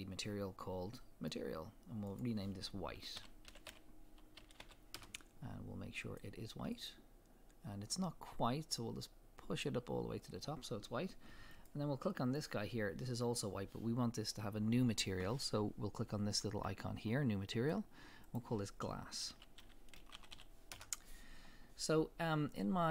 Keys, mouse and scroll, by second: 0.7-1.0 scroll up 2, 1.0-2.1 middle drag, 2.1-6.2 drag, 5.0 Return, 6.8 click, 11.5 click, 17.5 click, 18.3-22.9 drag, 20.3 s, 20.8 Return, 21.8 scroll up 1.